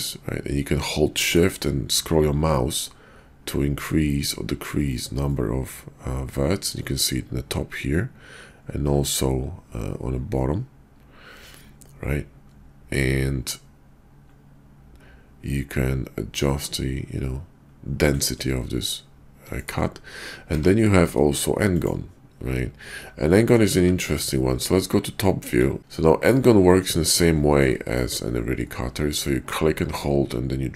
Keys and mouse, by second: 20.5 d, 23.2-23.5 drag, 25.3 KP_5, 27.7 shift+click, 29.5-30.7 drag.